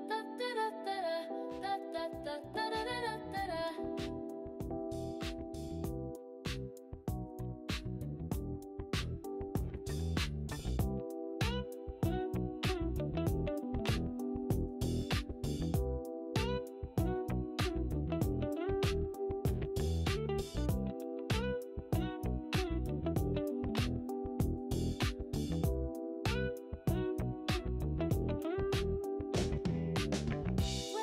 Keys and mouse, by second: 2.5 g, 3.1 click, 3.8 click, 4.4 g, 4.9 click, 6.0 click, 7.2 g, 7.9 click, 10.3 click, 17.0 click, 19.2 click, 21.0 click, 22.1 g, 24.5 click, 26.8 click, 28.1 click, 29.5 g.